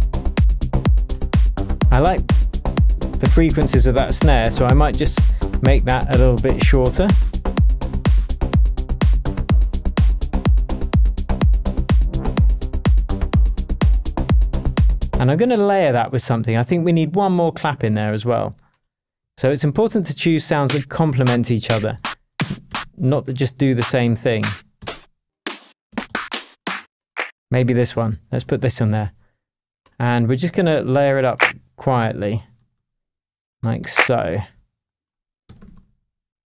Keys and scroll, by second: 0.0 Return, 15.2 space, 19.2 Down, 21.2 Down, 21.6 Up, 21.9 Down, 22.6 Up, 24.8 Up, 32.6 Right, 35.6 super+d.